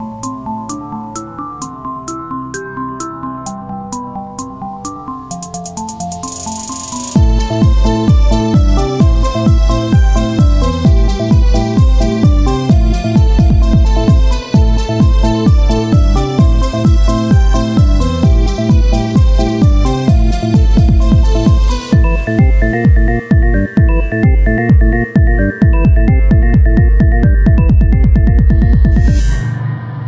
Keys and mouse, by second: 1.9-6.0 drag, 3.6 Tab, 5.0 Tab, 6.4 Tab, 7.3 z, 10.5 c, 13.9 x, 15.3 z, 16.3 ctrl+Tab, 17.7 f, 20.1-22.5 drag, 22.5 ctrl+z, 23.2 o, 24.2-25.6 drag, 24.9 x, 25.8 Tab, 28.8 z, 29.7-30.0 drag.